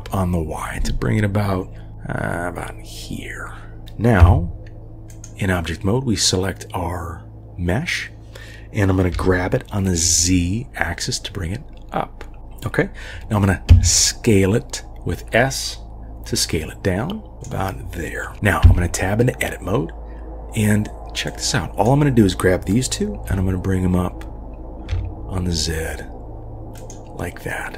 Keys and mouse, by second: 4.2 Tab, 9.1 g, 13.7 s, 18.6 Tab, 21.3-26.9 drag, 23.3 g.